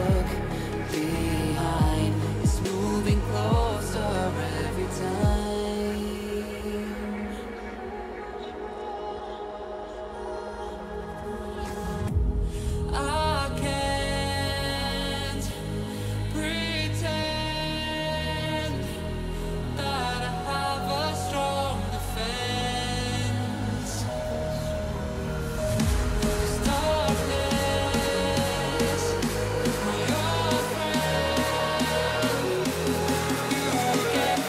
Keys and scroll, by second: 2.8 q.